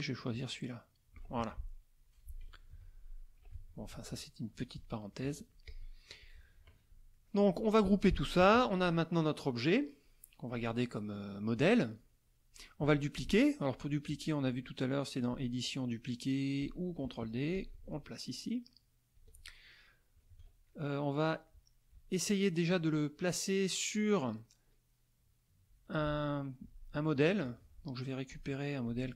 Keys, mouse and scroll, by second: 0.3 click, 1.4 F1, 2.7 F2, 3.5 F1, 3.9 KP_Subtract, 4.8 middle click, 5.3 F1, 5.6 click, 6.2 click, 7.1 middle click, 8.4 ctrl+g, 8.9 ctrl+middle click, 15.3 click, 16.6 click, 17.6-19.3 ctrl+drag, 20.3 ctrl+s, 20.7 ctrl+middle click, 20.7-21.2 ctrl+scroll up 1, 21.5 middle click, 21.5-21.9 scroll up 1, 22.7 click, 28.3 click, 28.9 click.